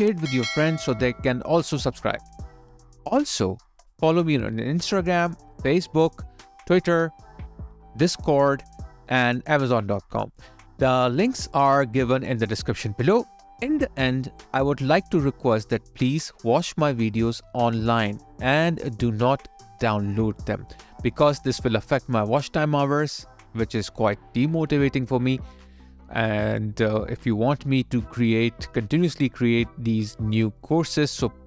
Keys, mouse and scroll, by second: 2.6 alt+middle click, 3.4 alt+click, 6.4 alt+right click, 8.0 alt+click.